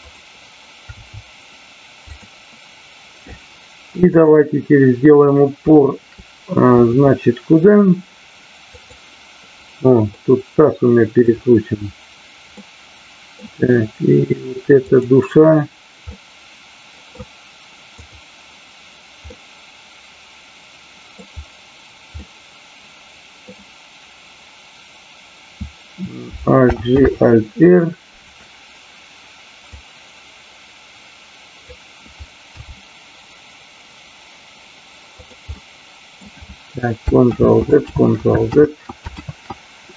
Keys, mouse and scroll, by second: 0.8 r, 2.1 click, 7.0-7.7 middle drag, 10.2-11.3 middle drag, 12.6-13.3 middle drag, 14.7-15.7 drag, 16.2-17.3 middle drag, 17.9 click, 19.3-21.1 middle drag, 22.2-23.4 middle drag, 26.6 alt+g, 27.1 alt+r, 29.8-31.6 drag, 35.2 click, 35.5 scroll up 1, 35.7-36.2 middle drag, 37.3 ctrl+z, 37.9 ctrl+z, 38.5 ctrl+z, 39.1 ctrl+z.